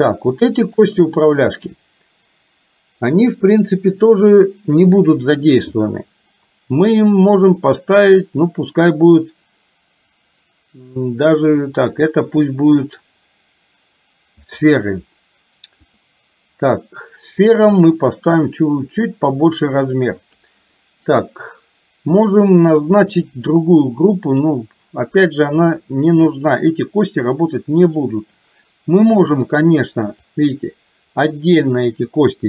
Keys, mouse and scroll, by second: 0.7 shift+click, 7.5-14.6 drag, 15.9 click, 17.5-20.5 drag, 23.2 click, 24.5-25.9 drag, 26.4 click, 30.5-32.4 drag.